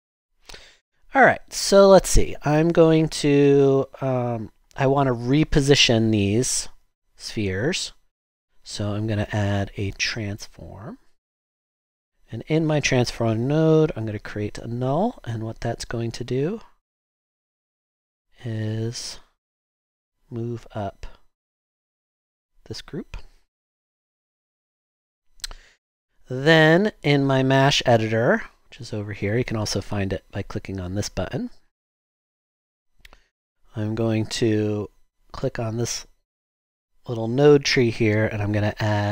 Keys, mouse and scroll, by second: 15.3 w, 16.3 w, 18.6 typing.